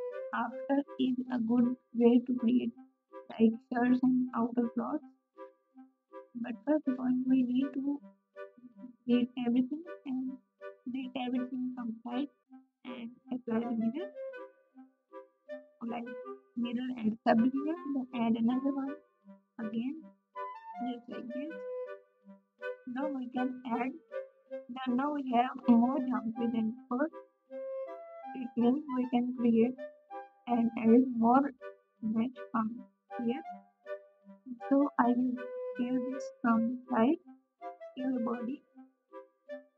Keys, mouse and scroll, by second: 2.6 Tab, 2.6 x, 4.2 alt+z, 4.2 Tab, 19.3 g, 24.8 ctrl+z, 26.2 k, 33.8 s.